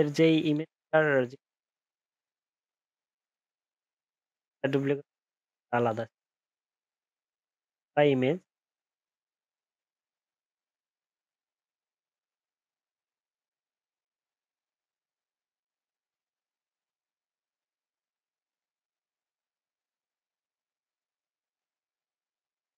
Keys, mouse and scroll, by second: 10.1 ctrl+z, 10.9 ctrl+shift+z.